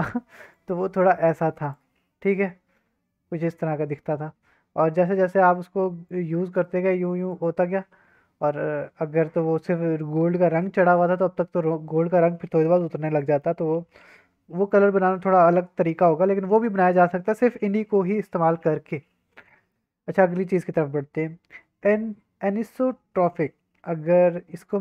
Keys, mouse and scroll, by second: 0.5-1.7 drag, 2.2-3.5 drag, 2.2 middle click, 3.5 middle click, 3.5 click, 3.6-4.9 middle drag, 6.0-7.3 drag, 7.5-8.6 middle drag, 8.4 click, 8.6-9.2 drag, 9.3 click, 9.4-11.1 middle drag, 11.5-12.0 middle drag, 13.1 middle drag, 16.1 middle drag, 19.4 middle drag, 19.8-20.3 scroll down 1, 20.3 scroll up 2.